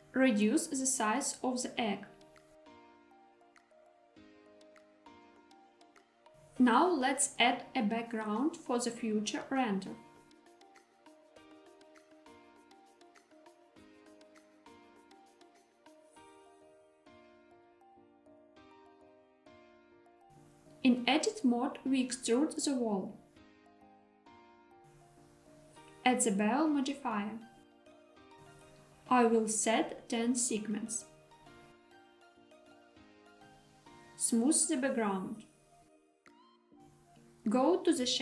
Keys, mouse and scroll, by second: 0.0 shift+middle click, 0.2 s, 3.7 click, 4.3-6.3 middle drag, 6.7 shift+a, 8.8-9.4 scroll down 1, 9.4 scroll down 2, 9.6-10.3 shift+middle drag, 10.6-11.0 scroll down 1, 11.9 s, 16.3 click, 16.6 shift+middle click, 16.8 Tab, 18.8 click, 19.5-19.9 scroll down 2, 20.1 shift+middle click, 20.3 e, 20.4 z, 24.1 click, 24.8 scroll down 3, 26.8 click, 28.4-33.0 drag, 33.4 Tab, 33.5 right click, 34.3 click, 35.4-35.8 middle drag.